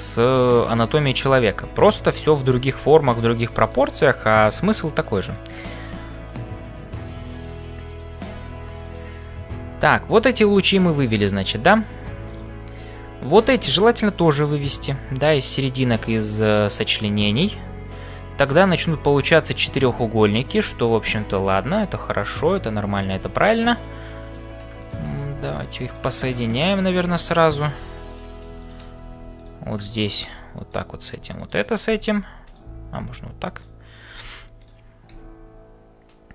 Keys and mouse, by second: 0.0-36.3 typing, 3.7 click, 7.9 click, 12.2 click, 15.1 click, 22.3 click, 24.3 click, 24.8 shift+click, 26.5 shift+click, 28.0 click, 28.6 click, 29.9 click, 31.3 click, 32.4 click, 34.6 click.